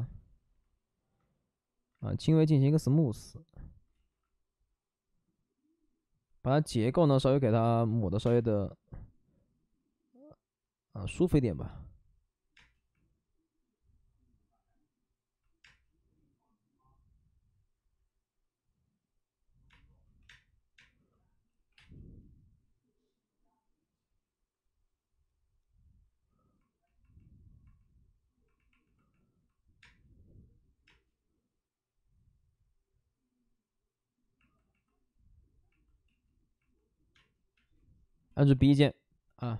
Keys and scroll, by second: 0.0-0.2 typing, 1.6 b, 1.9 ctrl+d, 1.9 s, 3.9 ctrl+z, 7.5 ctrl+z, 7.5-8.2 typing, 11.3 5, 12.5 space, 15.6 space, 20.1-21.7 typing, 29.8 space, 30.8 space, 36.0 ctrl+z, 37.1 space, 37.5 space, 38.1 b, 39.4 space.